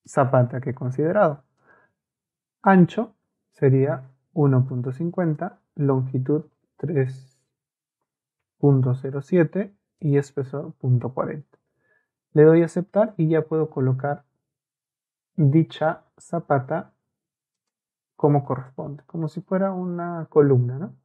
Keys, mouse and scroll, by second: 1.0 Escape, 1.6 click, 5.3 click, 8.1 BackSpace, 8.4 KP_3, 9.2 KP_4, 10.0 click, 10.9 KP_4, 12.6 click, 17.6 click, 19.1 Escape, 19.3 Escape, 19.5 Escape.